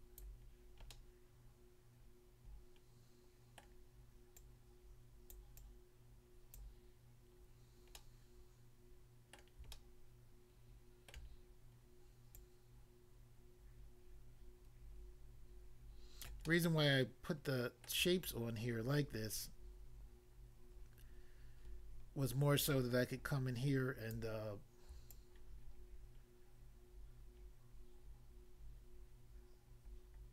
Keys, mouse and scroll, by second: 0.2 click, 0.9 middle click, 3.6 middle click, 4.4 click, 5.4 click, 5.6 click, 6.6 click, 7.5 scroll up 1, 8.0 middle click, 9.4 middle click, 9.8 shift+middle click, 11.5-12.3 scroll up 1, 12.3 click, 16.2 click, 16.4 middle click, 17.9 middle click, 18.2 shift+click, 25.1 shift+click.